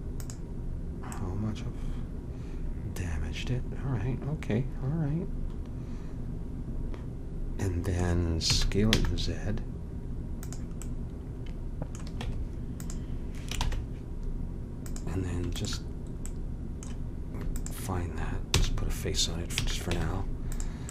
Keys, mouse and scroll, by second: 8.5 s, 12.2 Tab, 13.6 ctrl+Tab, 15.5-16.5 drag, 16.8 click, 18.1-19.4 drag, 18.5 f, 19.6 a, 19.9 Tab.